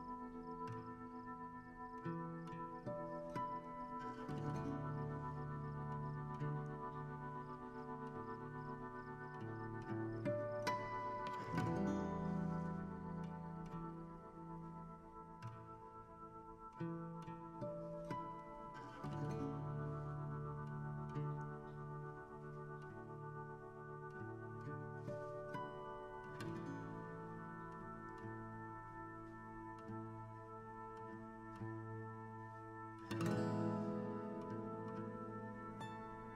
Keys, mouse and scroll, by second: 1.3 h, 2.5 click, 4.6 shift+a, 5.1 KP_1, 5.4 g, 6.9 g, 8.4-10.4 drag, 10.4-13.6 shift+middle drag, 14.4-16.8 drag, 17.3 KP_7, 18.1 shift+middle click, 18.4 scroll up 1, 19.0-22.4 typing, 20.1-20.4 scroll down 4, 22.8 scroll up 3, 23.5 r, 24.0 g, 26.1 r, 26.4 g, 29.1-30.8 drag.